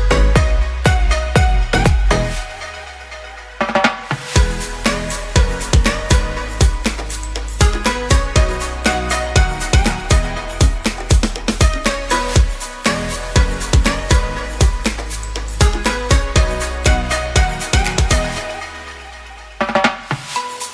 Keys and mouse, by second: 4.4 click, 7.2 click, 9.8 shift+middle click, 10.6 a, 10.9 a, 11.3 shift+middle click, 13.1 ctrl+j, 13.7 Tab, 14.1 a, 14.6 a, 15.3 ctrl+t, 17.4 Tab, 17.7 ctrl+s, 18.8-20.7 drag.